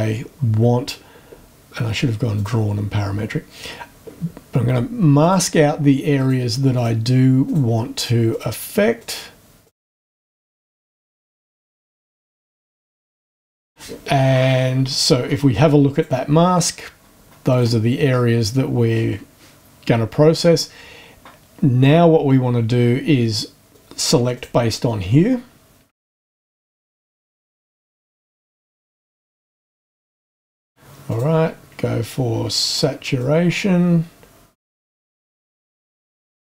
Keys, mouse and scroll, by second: 2.4 click, 5.2 click, 6.2 click, 6.7 click, 7.4 click, 8.3 click, 9.0 click, 9.6 click, 10.0 click, 10.1 click, 10.4 click, 10.6 click, 11.7 shift+scroll down 2, 12.2 click, 12.5 click, 12.6 click, 13.0 click, 13.1 click, 13.3 click, 13.4 click, 15.9 click, 17.5 click, 23.7 click, 24.3 click, 26.1-28.0 drag, 28.0 scroll up 1, 28.2 click, 29.0 scroll up 1, 29.1 click, 30.2 click, 31.0 click, 33.2-35.0 drag, 35.1-36.5 drag.